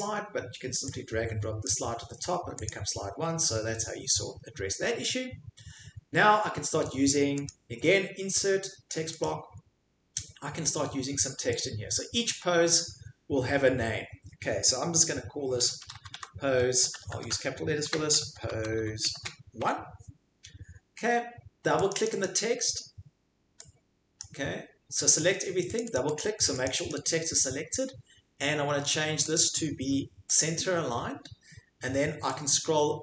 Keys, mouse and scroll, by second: 1.8 click, 2.7 click, 7.5 click, 9.2 click, 12.8 click, 15.3-19.6 typing, 16.9 Insert, 17.8 Caps_Lock, 21.9-24.2 drag, 25.1 click, 25.8 click, 25.9 click, 26.2 click, 26.7 click, 26.9 click, 29.4 click, 30.4 click.